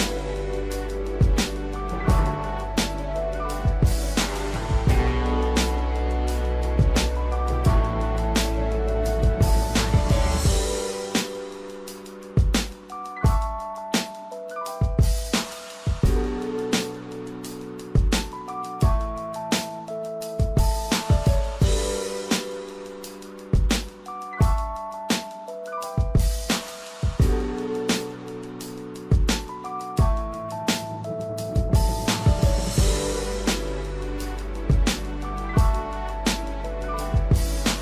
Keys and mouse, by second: 2.0 shift+middle click, 5.2 shift+middle click, 7.5 click, 7.8-9.5 drag, 11.8 shift+middle click, 13.2-16.1 drag, 16.5 shift+middle click, 20.8 shift+middle click, 22.0 ctrl+r, 26.1 g, 28.4 shift+middle click, 29.1 click, 29.5-30.5 drag, 30.8 shift+middle click, 31.5 click, 32.3 g, 35.4 g.